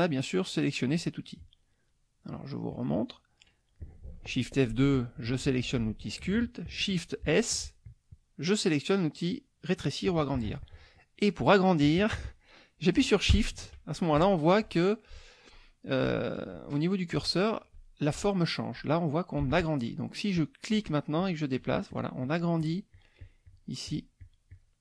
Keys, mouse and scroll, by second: 0.8 click, 2.7 click, 5.5 F2, 7.2 shift+s, 20.7 shift+click, 21.2 shift+click, 21.6 shift+click, 23.8 shift+click.